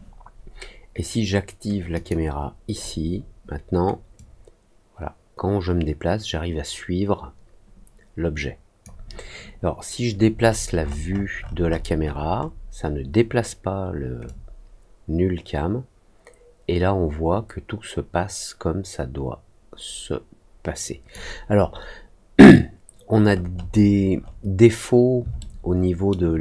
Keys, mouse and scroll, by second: 1.9 click, 4.1-8.8 drag, 10.4 middle click, 10.7 middle click, 11.1 middle click, 11.3 middle click, 11.6 middle click, 11.9 middle click, 12.3 middle click, 14.2-21.0 drag, 23.1 middle click, 23.5 middle click, 24.1 middle click, 25.3 alt+middle click.